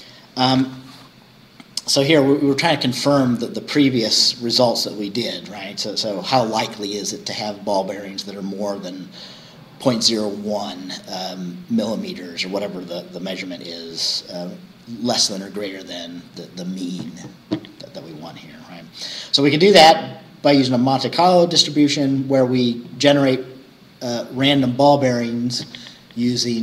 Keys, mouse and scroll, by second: 1.8 scroll down 2, 4.8 scroll down 2, 22.9 click.